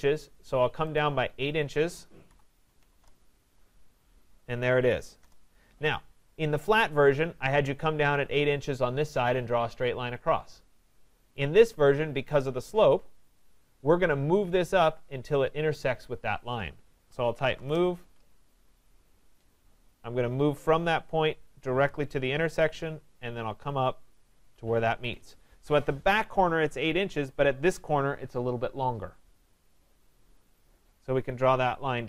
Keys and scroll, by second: 2.9 Return, 17.6 Return, 24.8 Escape.